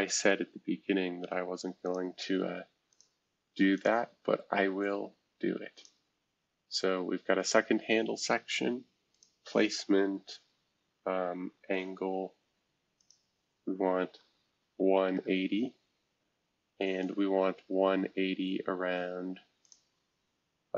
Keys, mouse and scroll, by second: 1.8-5.3 drag, 5.7-7.3 drag, 9.1-10.7 drag, 13.0-14.6 drag, 14.5-15.6 typing, 16.8-17.6 scroll down 1, 17.6 scroll up 2, 19.6-20.7 drag.